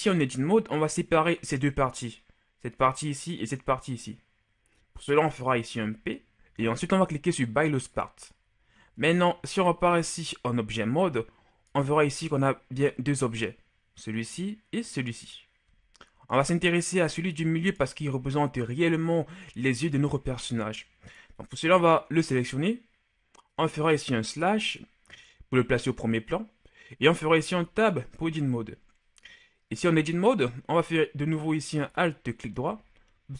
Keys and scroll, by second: 6.1 p, 6.4 p, 9.3 Tab, 12.9 g, 15.9 g, 24.3 KP_Divide, 27.8 Tab.